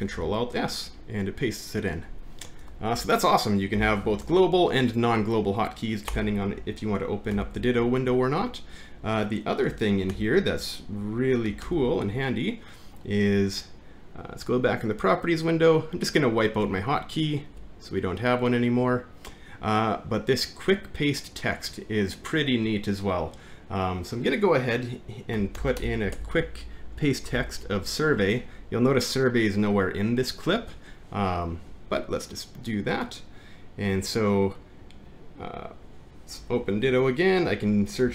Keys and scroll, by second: 0.1 ctrl+alt+s, 0.2 ctrl+v, 3.0 Home, 3.8 Up, 6.1 BackSpace, 7.3 alt+`, 10.2 alt+`, 11.7 alt+`, 31.2-31.9 typing, 36.5 alt+`.